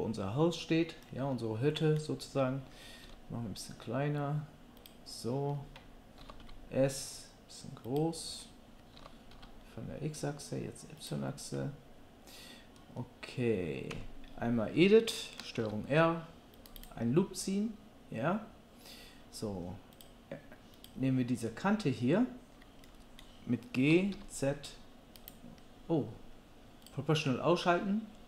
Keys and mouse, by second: 3.1 s, 3.2-9.0 middle drag, 6.2 s, 9.0 s, 13.9 Tab, 15.6 ctrl+r, 20.0 click, 23.9 g, 26.8 click.